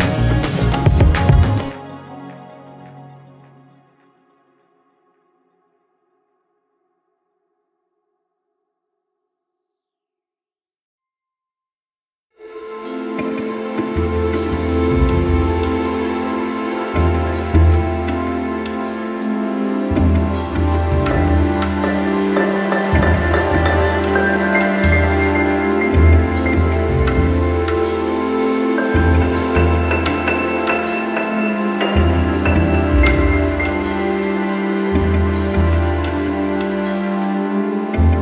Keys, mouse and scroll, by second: 1.6-3.4 alt+middle drag, 3.4-4.0 scroll, 4.6 middle click, 6.4 click, 7.2 click, 9.0 click, 9.8 click, 9.9 click, 11.6 click, 12.5 click, 13.3 middle click, 14.0 click, 14.4 scroll, 15.8 click, 16.7 click, 17.8 click, 18.4-18.7 scroll, 19.0 middle click, 20.7 shift+click, 21.5 alt+middle click, 22.0 click, 24.0 click, 26.3 alt+middle click, 27.6 click, 28.7 alt+middle click, 30.0 click, 31.1 click, 32.0 alt+middle click, 33.2 click, 34.6 click, 36.2 click, 36.9 alt+middle click.